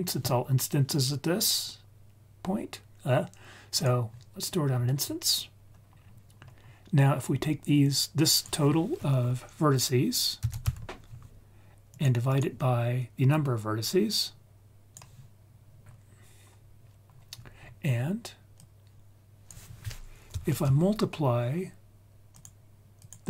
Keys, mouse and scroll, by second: 0.8-3.8 drag, 4.7-5.5 scroll down 4, 5.5-5.9 scroll up 2, 5.9 scroll down 2, 6.3-6.9 scroll up 3, 7.8-12.0 drag, 12.2 click, 13.2-14.9 drag, 15.8-17.0 scroll up 2, 17.0-18.4 scroll up 5, 18.5 click, 18.7-22.4 drag, 22.9 click.